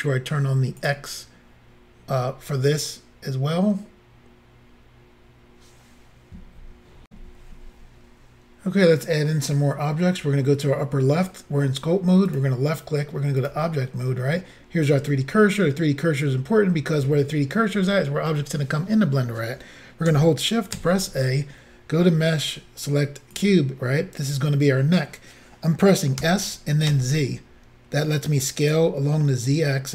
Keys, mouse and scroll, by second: 0.8 click, 7.1 Insert, 12.3 click, 13.4 click, 20.8 a, 23.4 click, 26.2 s, 26.9 z, 28.7 click.